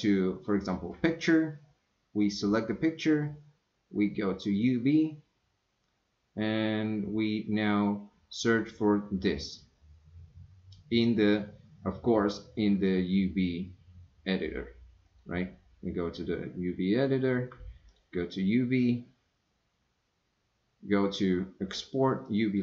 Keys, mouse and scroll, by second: 2.2 click, 4.5-10.9 drag, 12.8-15.3 drag, 17.9-22.6 drag.